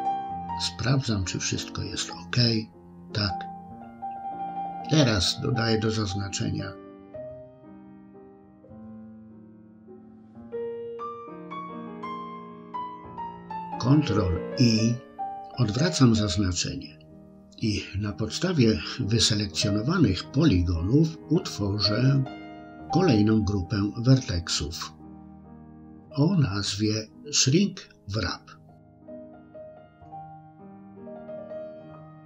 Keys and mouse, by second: 0.0 click, 1.7-3.0 middle drag, 4.3 click, 7.1 click, 8.0-10.3 middle drag, 14.5 ctrl+i, 16.1-18.1 middle drag, 20.0 click, 21.7 click, 21.9-29.7 drag.